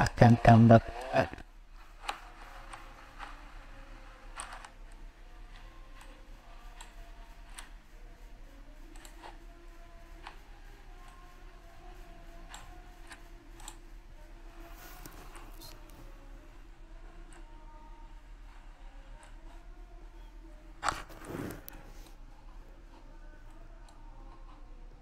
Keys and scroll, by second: 4.3 ctrl+z.